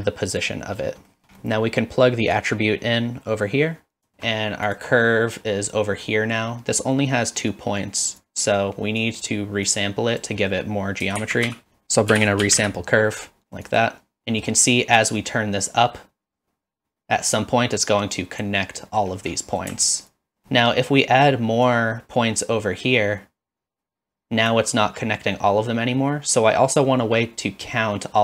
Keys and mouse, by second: 1.1 middle click, 1.5 middle click, 2.4-4.1 drag, 4.1 shift+middle click, 4.7 click, 7.7 click, 9.1 click, 9.8 click, 11.2 shift+a, 13.8 click, 14.2 middle click, 15.3-18.4 drag, 19.0 middle click, 20.0 alt+shift+click, 20.6 middle click, 21.7-24.6 drag.